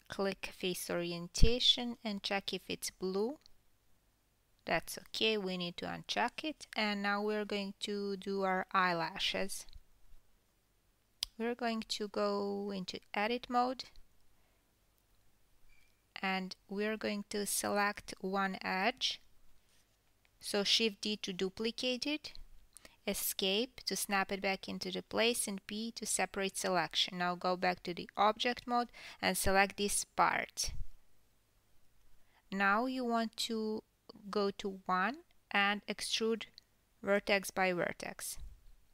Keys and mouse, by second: 0.8-10.1 drag, 7.1 KP_1, 11.7-17.3 ctrl+drag, 16.3 KP_1, 17.3-21.9 middle drag, 17.8 Tab, 21.3 2, 21.9-22.6 drag, 22.6-32.5 shift+middle drag, 23.0 shift+d, 25.3 p, 26.8 Tab, 31.6 KP_1, 33.0-38.9 ctrl+middle drag, 34.5 Tab, 36.3 1, 37.1-37.5 drag, 38.1 e.